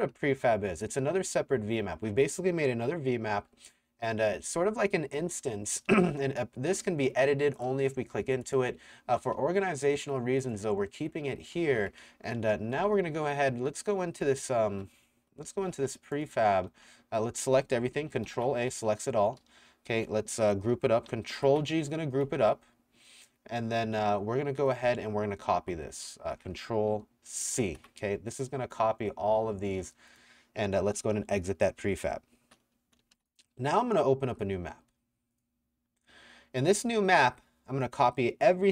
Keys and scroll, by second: 0.1 a, 1.9 s, 4.5 d, 5.6-7.2 typing, 8.7 w, 9.4 s, 10.6-12.8 typing, 12.3 Escape, 14.2-17.4 typing, 18.3 ctrl+a, 19.4 a, 21.3 ctrl+g, 24.6-26.1 typing, 27.6 ctrl+c, 31.2-33.7 typing.